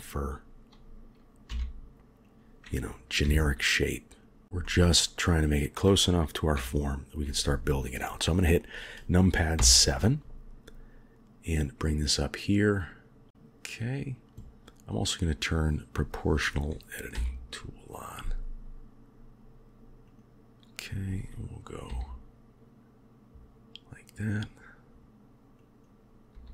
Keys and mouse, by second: 1.4 s, 3.1 g, 4.5-5.5 middle drag, 6.4 KP_7, 13.3 click, 14.8 click, 17.0 s, 21.8 g, 25.4 click, 26.2 g.